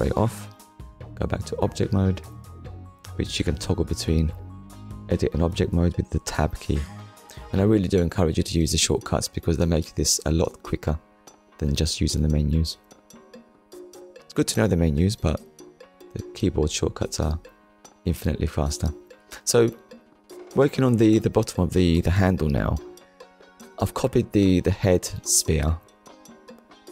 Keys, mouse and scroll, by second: 0.9 click, 1.6 click, 2.2 click, 2.8-3.2 scroll down 2, 3.7 shift+middle click, 5.2 scroll down 1, 5.7 shift+middle click, 6.2 middle click, 7.3 ctrl+s, 7.8 middle click, 8.6 KP_1, 9.7-10.2 scroll up 2, 10.9 shift+middle click, 11.5 scroll up 1, 12.5-12.9 scroll down 2, 13.0 shift+middle click, 14.0 click, 14.9 shift+middle click, 17.2 shift+d, 18.6 right click, 20.0 click, 22.0 click, 23.5 shift+middle click, 25.2 shift+middle click.